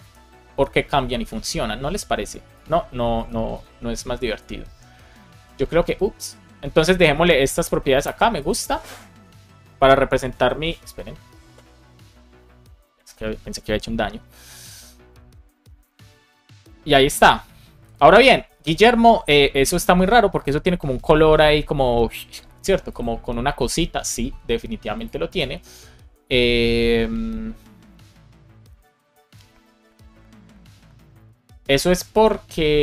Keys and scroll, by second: 7.0 super+z, 8.1 super+s.